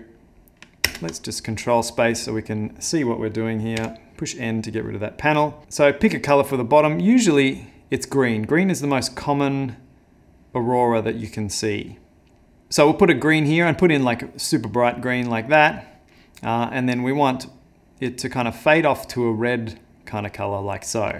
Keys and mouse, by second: 0.9 ctrl+space, 1.8 middle click, 3.8 n, 4.4 middle click, 5.6 click, 12.3 click, 13.0 middle click, 14.1 click, 15.4 click, 20.7 middle click.